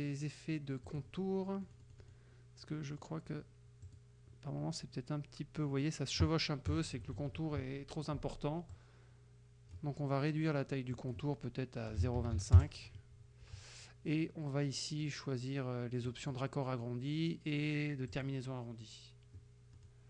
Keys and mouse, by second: 0.9 click, 1.7 middle click, 3.0 middle click, 3.9 click, 6.7 KP_Add, 6.9 KP_Subtract, 8.8-10.0 drag, 11.0 click, 12.0 KP_0, 12.2 KP_Decimal, 12.3 KP_2, 12.4 KP_5, 16.2 click, 18.2 click, 19.8 middle click.